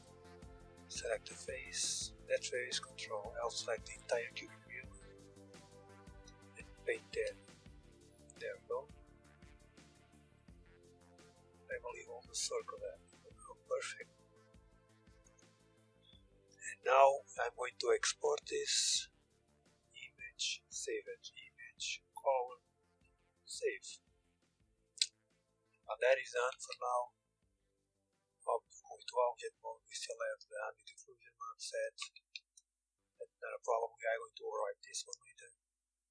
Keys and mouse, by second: 2.6 ctrl+l, 3.4 Tab, 5.0-11.5 middle drag, 14.8 KP_1, 16.4 KP_1, 19.7-20.7 drag, 22.7-24.3 drag, 25.4 Tab, 25.6-27.1 drag, 26.1 Tab, 31.7 Tab.